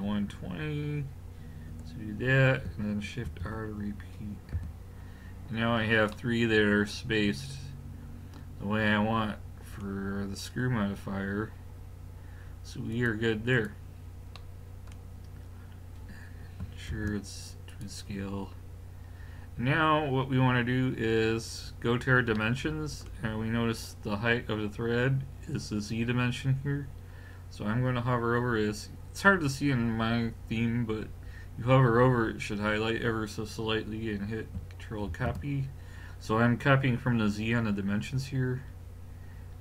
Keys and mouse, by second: 3.3 shift+r, 4.6 a, 5.7 click, 10.2-12.1 middle drag, 12.9 click, 14.7-17.8 middle drag, 16.9 ctrl+a, 22.4 middle click, 35.1 ctrl+c.